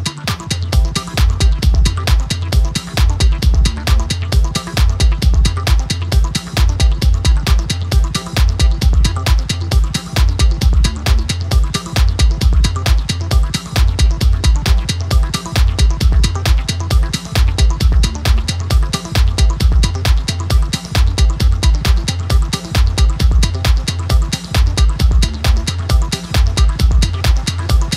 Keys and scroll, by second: 3.7 d.